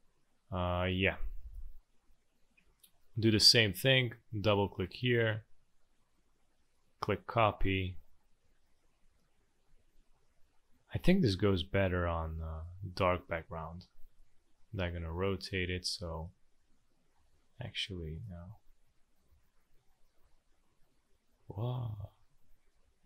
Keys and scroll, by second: 1.0 space, 7.7 ctrl+d, 7.9 ctrl+d, 8.2 ctrl+d, 8.6 ctrl+d, 8.9 ctrl+d, 9.0 ctrl+d, 9.2 ctrl+d, 9.4 ctrl+d, 9.5 ctrl+d, 9.7 ctrl+d, 12.2 v, 13.2 space, 17.1 ctrl+z, 18.6 ctrl+d, 19.3 ctrl+z, 20.2 ctrl+d, 21.3 ctrl+d, 21.8 ctrl+d, 22.4 ctrl+d, 22.6 ctrl+d, 22.8 ctrl+d, 23.0 ctrl+d.